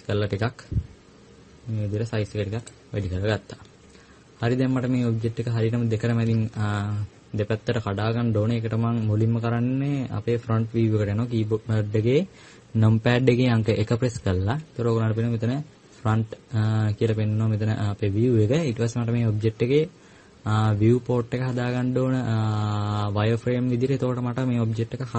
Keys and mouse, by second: 13.9 KP_1.